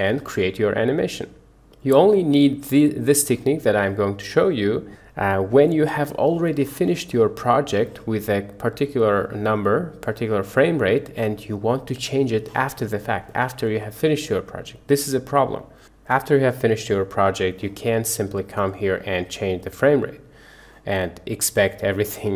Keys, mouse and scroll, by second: 1.7 click, 8.8-11.3 drag, 18.7-19.8 drag.